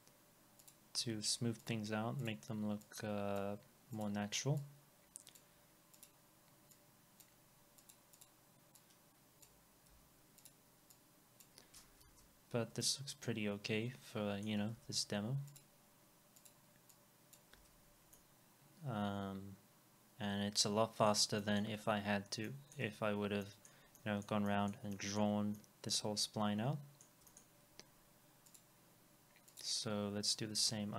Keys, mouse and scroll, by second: 8.2 double click, 9.9 Delete, 12.1 alt+x, 12.4 scroll down 1, 12.4 alt+x, 12.8 alt+middle click, 14.8 alt+x, 14.8 middle click, 15.1-15.7 scroll up 1, 17.6 alt+x, 17.8 scroll down 1, 18.1 alt+middle click, 21.4 alt+middle click, 22.5 alt+middle click, 24.5 alt+middle click, 27.3 alt+middle click, 30.2 scroll up 1, 30.6 alt+x.